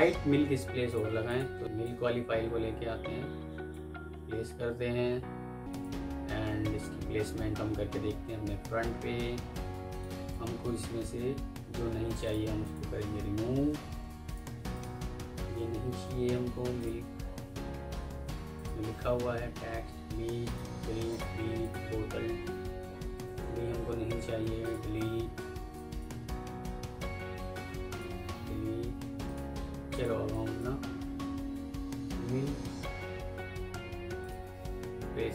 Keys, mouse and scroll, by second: 1.2 double click, 1.6 ctrl+v, 8.9 F4, 11.5 ctrl+u, 12.5 double click, 13.4 ctrl+u, 14.6 double click, 15.8 ctrl+u, 16.2 Escape, 17.8 ctrl+u, 18.1 Escape, 19.3 Delete, 20.6 Delete, 23.0 ctrl+z, 23.9 ctrl+u, 24.3 Escape, 27.2 ctrl+u, 27.6 Escape, 28.7 Delete, 30.2 double click, 31.1 ctrl+z, 33.9 Escape, 34.9 Delete.